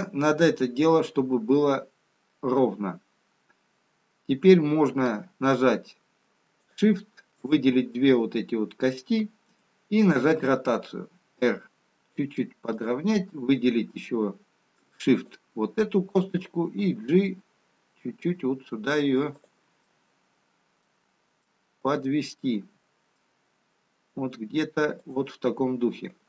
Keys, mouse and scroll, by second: 7.8 shift+click, 10.1 r, 15.6 shift+click, 16.8 g, 20.3 middle click, 22.3 middle click.